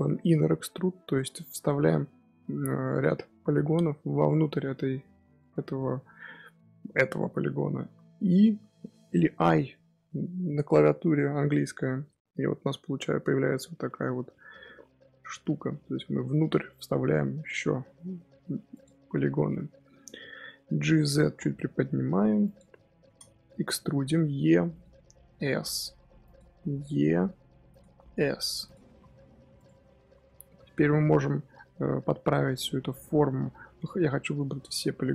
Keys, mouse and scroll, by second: 4.9-7.8 middle drag, 7.8 i, 19.0-20.0 middle drag, 20.0-20.6 scroll up 1, 20.6-21.1 scroll up 1, 21.1 g, 23.9 e, 25.2 s, 26.6 e, 27.8 s, 28.7 g, 29.7-31.9 middle drag, 31.9-32.8 scroll up 2, 32.8-35.1 middle drag.